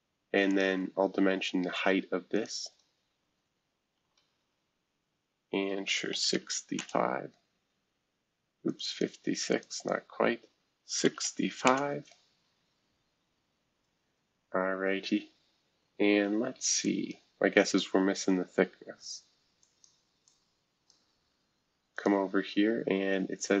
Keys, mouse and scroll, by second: 0.5 click, 0.9-1.5 scroll down 1, 2.3 shift+click, 5.9-6.8 typing, 8.6-11.2 drag, 11.2 5, 11.6 Return, 13.9 scroll down 2, 16.8 click, 17.7 click, 19.6 click, 20.3 click, 21.9 click, 22.6-23.6 scroll down 2.